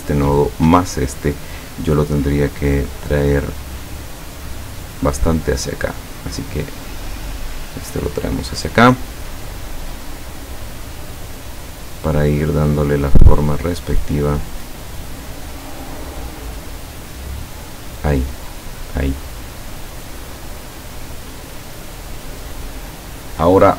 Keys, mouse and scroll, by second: 0.5 shift+click, 3.2-5.1 drag, 5.6 click, 6.3-8.4 drag, 10.1-13.9 drag, 14.4 click, 15.5 click, 16.8-21.5 drag.